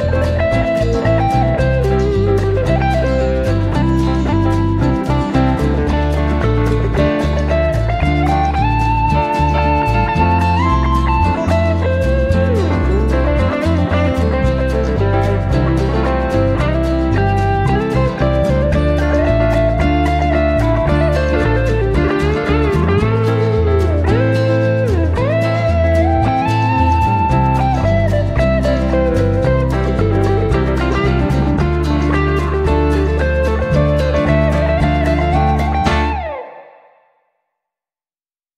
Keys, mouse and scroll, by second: 1.3 click, 2.8 click, 4.1 click, 5.7 click, 7.2 click, 10.6 click, 13.6 click, 15.5 click, 16.7-17.8 drag, 19.2-20.9 drag, 22.1-24.0 drag, 26.3 click, 30.5 click, 32.9 click, 34.4-38.5 drag.